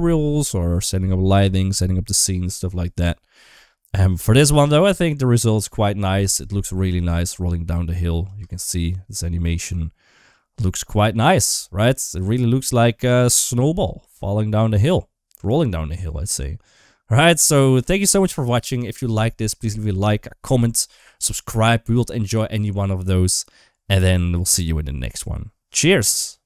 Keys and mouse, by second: 6.6-8.2 drag, 8.2 space, 13.2-17.9 drag.